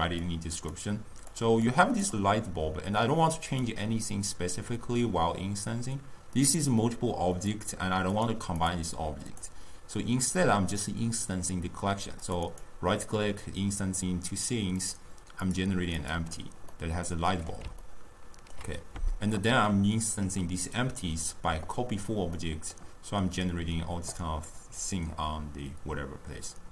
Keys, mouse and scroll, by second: 0.4 click, 1.4 click, 1.8 click, 3.6 click, 7.4 click, 8.2 click, 8.7 click, 9.4 click, 12.3 click, 12.6-14.9 right drag, 14.9 click, 15.5 click, 16.1 click, 16.8-24.9 middle drag, 24.9 click.